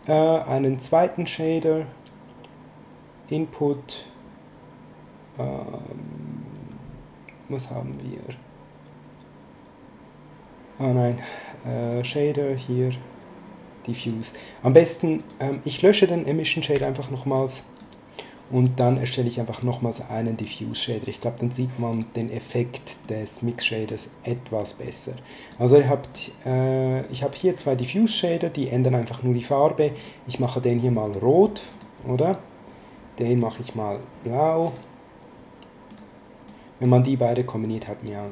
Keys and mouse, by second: 0.0 click, 1.3 click, 14.0 click, 15.2 click, 16.7 x, 17.4 click, 18.5 click, 21.9 click, 23.0 click, 26.1 click, 29.9 click, 33.4 click, 34.6 click, 35.9 click.